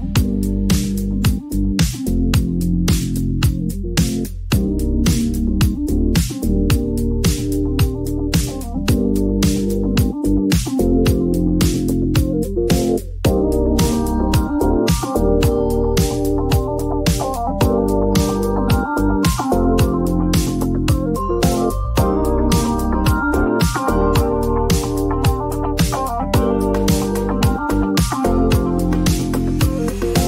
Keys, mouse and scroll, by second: 0.6 click, 2.8 click, 3.8-6.4 typing, 7.9-9.3 typing, 8.1 click, 9.5-11.2 drag, 11.9 Return, 13.4 Return, 15.8 click, 17.8-20.9 drag, 18.5 typing, 19.7 Return, 22.2 click, 22.8 click, 23.0-24.5 typing, 24.6 click, 24.8 click, 25.4 Return, 25.4 click, 25.7-27.7 typing, 26.9 click, 28.7 typing.